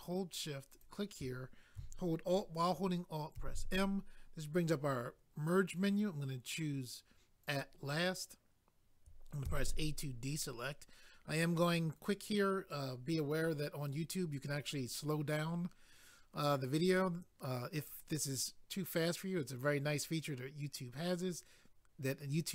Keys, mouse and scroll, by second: 0.7 shift+click, 0.8 shift+click, 3.4 alt+m, 7.4 click, 7.5 click.